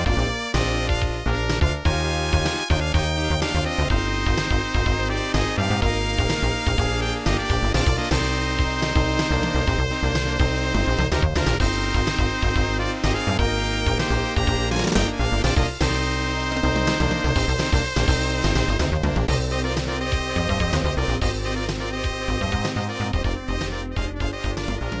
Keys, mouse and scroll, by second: 0.3 click, 0.7 click, 7.3 scroll down 2, 8.4-9.2 scroll down 2, 12.1 click, 12.9 click, 13.1 click, 16.4 click, 16.5 click, 17.1 click, 17.3 click.